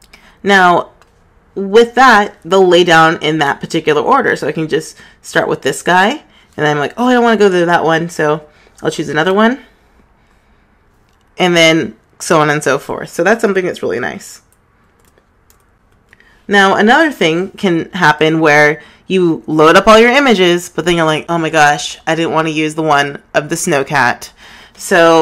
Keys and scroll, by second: 10.2 Right, 16.2 super+z.